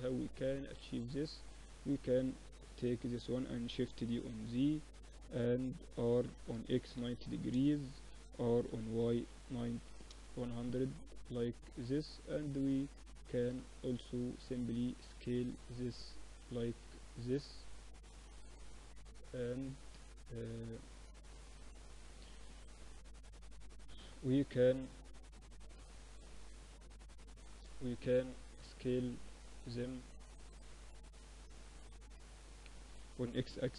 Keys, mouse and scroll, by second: 0.7-2.6 drag, 1.6 KP_1, 2.9 shift+d, 5.4 r, 7.7 r, 10.0-11.8 drag, 14.3 s, 15.8-17.8 middle drag, 16.6 z, 17.8-19.7 drag, 18.9 z, 19.5 Tab, 19.7-22.1 middle drag, 20.9 a, 21.0 a, 32.4 s.